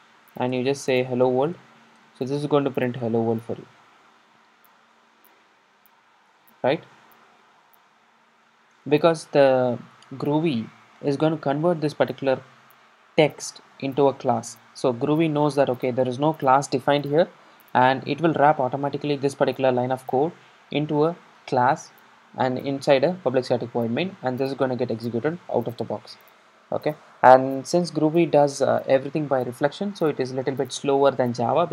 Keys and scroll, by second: 8.2 ctrl+shift+r.